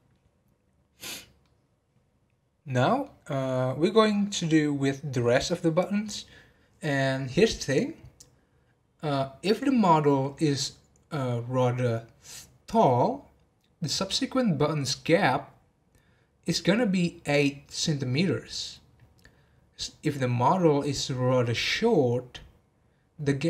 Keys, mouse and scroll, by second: 1.4-3.1 middle drag, 3.1 scroll down 2.